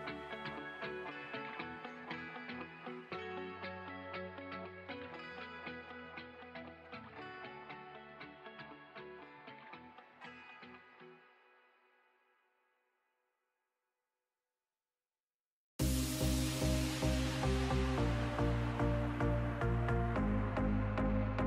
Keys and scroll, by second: 2.5 space, 5.4 space, 8.8 ctrl+z, 10.2 ctrl+z, 14.1 space, 16.3 space, 18.6 ctrl+z.